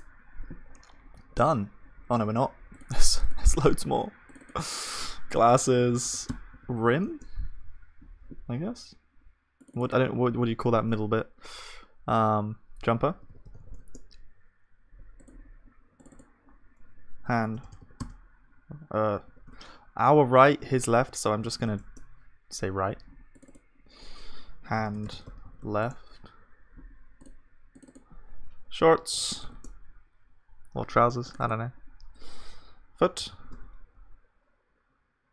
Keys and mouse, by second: 2.9-5.3 drag, 5.9 s, 6.1 s, 15.9-20.6 drag, 20.6 BackSpace, 33.3 o.